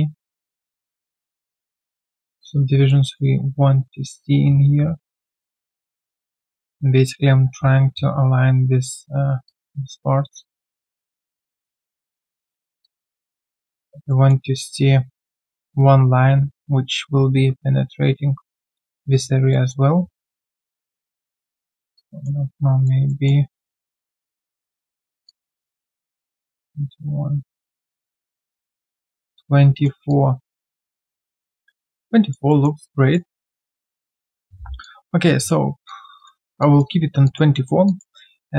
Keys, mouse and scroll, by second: 2.5 alt+click, 3.1 alt+middle click, 5.8 alt+click, 6.5 alt+middle click, 9.4 alt+click, 12.8 alt+click, 14.1 alt+middle click, 19.5 alt+middle click, 22.5 alt+click, 23.0 alt+middle click, 23.5 alt+middle click, 25.2 alt+click, 25.9 alt+middle click, 26.5 alt+middle click, 30.1 alt+click, 31.3 alt+middle click, 31.7 alt+click, 32.5 alt+middle click, 32.8 alt+click, 33.3 alt+middle click, 33.6 alt+click, 34.2 alt+middle click, 34.8 alt+click, 35.2 alt+right click, 35.8 alt+click, 36.1 alt+click, 36.9 alt+right click, 37.2 alt+click, 37.5 alt+middle click, 37.8 alt+click, 38.4 alt+scroll down 1.